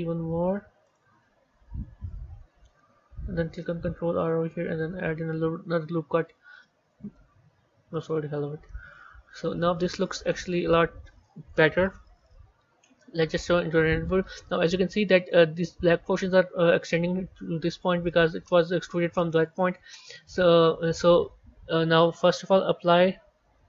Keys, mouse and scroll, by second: 1.5 KP_1, 2.0-3.7 scroll down 2, 3.7 ctrl+r, 7.1 Tab, 8.5-11.5 middle drag, 11.5 KP_1, 12.5 z, 14.2-21.4 middle drag.